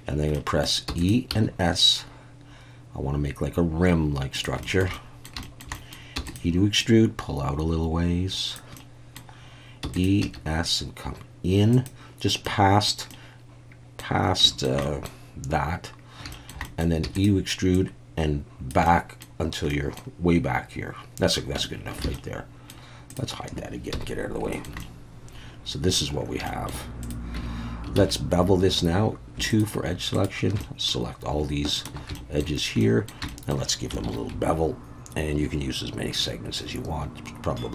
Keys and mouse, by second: 0.3 middle click, 0.9 e, 1.0 click, 1.3 s, 4.3 click, 4.6 shift+middle click, 5.0 middle click, 5.4 shift+middle click, 5.8 middle click, 6.2 e, 6.3 click, 6.8-8.5 drag, 8.8 middle click, 9.8 e, 9.9 click, 10.2 s, 11.7 click, 12.4 middle click, 13.1 middle click, 14.4 shift+middle click, 14.8 middle click, 16.3 shift+middle click, 16.7 middle click, 17.0 e, 17.1-18.7 drag, 18.9 middle click, 19.7 middle click, 21.6 Tab, 22.1 alt+a, 22.1-22.7 middle drag, 23.1 click, 23.9 h, 24.5 shift+middle click, 24.8-26.0 middle drag, 26.5 shift+middle click, 27.0 click, 27.4 Tab, 28.0 alt+a, 28.7 2, 29.5 alt+shift+click, 30.2 alt+shift+click, 30.6 middle click, 31.4 shift+a, 32.1 shift+middle click, 32.8 middle click, 33.3 shift+middle click, 34.0 ctrl+b.